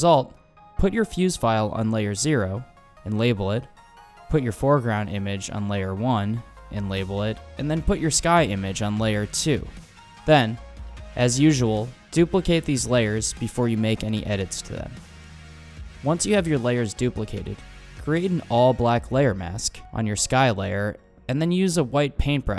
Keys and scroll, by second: 0.0-0.8 typing, 1.1 Return, 3.0-5.4 typing, 7.2 shift+super+j, 19.0 b, 19.7 ].